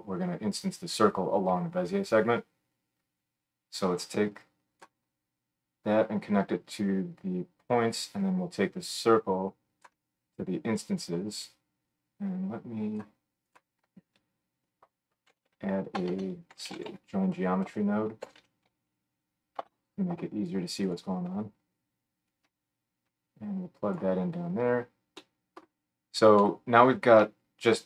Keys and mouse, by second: 3.2-13.6 drag, 13.6-22.3 middle drag, 14.1 F3, 16.1 BackSpace, 22.3-27.8 drag.